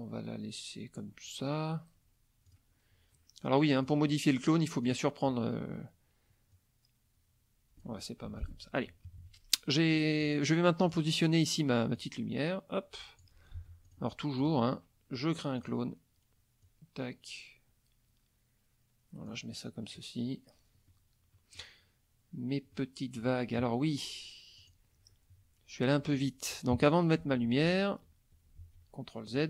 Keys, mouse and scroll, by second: 2.5 click, 3.8 click, 4.8 click, 6.5-8.0 drag, 8.3 F1, 8.4 click, 9.1 KP_Subtract, 10.0 middle click, 10.8 click, 12.0-13.4 drag, 13.6 ctrl+z, 13.9 ctrl+click, 14.4 ctrl+click, 15.6 click, 16.6-19.5 drag, 19.8 middle click, 20.9 middle click, 22.7 middle click, 24.6 click, 26.7 KP_Subtract, 27.4 ctrl+z, 28.6 ctrl+z, 29.3 ctrl+click.